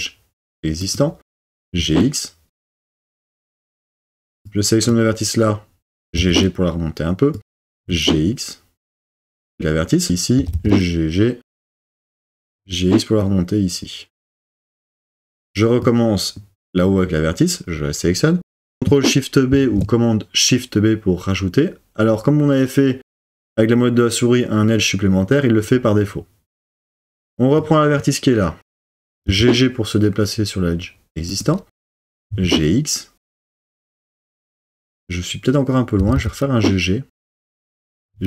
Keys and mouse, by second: 1.3 g, 1.6 x, 6.0 g, 6.3 g, 7.4 click, 7.6 g, 7.8 x, 9.1 click, 10.4 g, 10.6 g, 12.1 click, 12.4 g, 12.7 x, 14.5 click, 19.5 shift+super+b, 26.7 click, 29.1 g, 29.3 g, 32.0 g, 32.3 x, 36.0 g, 36.2 g, 37.7 click, 37.9 g, 38.1 x.